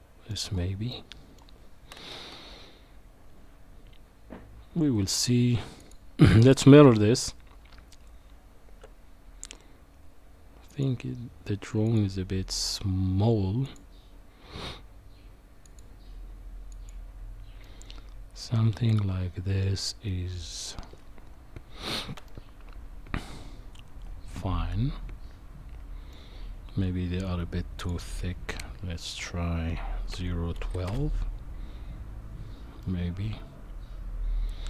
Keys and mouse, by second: 0.9 middle click, 2.2 KP_1, 5.8 click, 17.6-20.5 middle drag, 22.2-26.1 middle drag, 27.8 click, 29.1-30.9 drag, 32.8-34.6 middle drag.